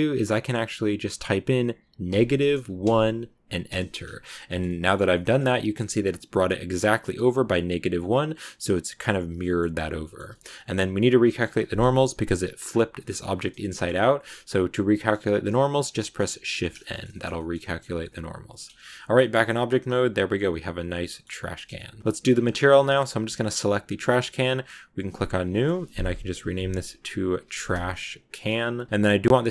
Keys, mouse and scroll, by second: 4.2 scroll down 1, 4.3 shift+middle click, 5.0-7.2 shift+scroll up 2, 7.2-10.4 middle drag, 10.4-10.9 scroll up 2, 10.9 scroll down 1, 11.1 shift+middle click, 11.9 KP_Decimal, 12.0 KP_Decimal, 12.5 scroll down 2, 12.5 scroll up 1, 12.9 middle click, 13.2 scroll down 2, 13.6 shift+middle click, 13.8-15.5 scroll down 1, 15.5-16.4 scroll down 1, 16.4 shift+n, 16.6 scroll down 2, 16.8 shift+middle click, 17.7 scroll down 2, 17.8 scroll up 1, 17.9 middle click, 18.5 scroll up 2, 18.6 Tab, 18.7-19.3 scroll down 5, 18.9 middle click, 19.1 a, 19.4-21.1 middle drag, 21.1 scroll up 2, 21.5 shift+middle click, 22.0 right click, 22.1 scroll up 2, 22.7-23.8 shift+middle drag, 23.8-24.4 scroll down 1, 24.4-28.3 drag, 29.2 click.